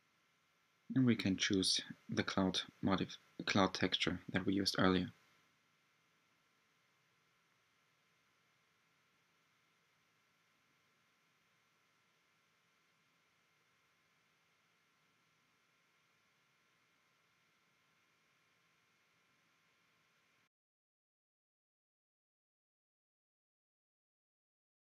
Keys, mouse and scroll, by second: 0.0-4.0 right drag, 4.0-6.2 drag, 9.9-11.3 drag, 11.3-11.9 scroll up 1, 11.9-16.9 middle drag, 16.9 click, 17.6 scroll up 2, 17.9-19.7 middle drag, 19.7-21.3 scroll down 1, 21.3-21.6 scroll down 1, 21.6-24.4 drag.